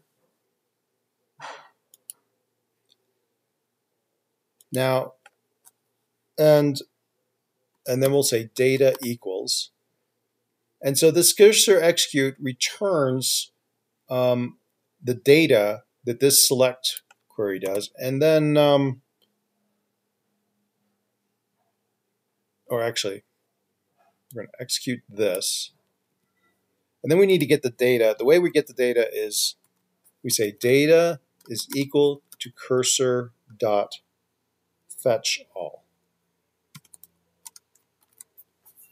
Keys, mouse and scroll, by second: 17.1 typing, 17.9 Return, 26.5 Delete, 28.6 typing, 30.4-33.8 typing, 35.0-38.3 typing, 37.6 Tab.